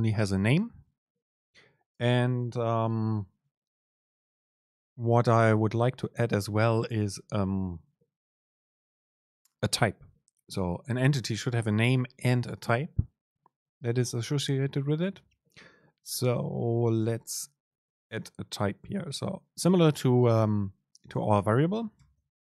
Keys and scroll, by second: 22.2 super+n.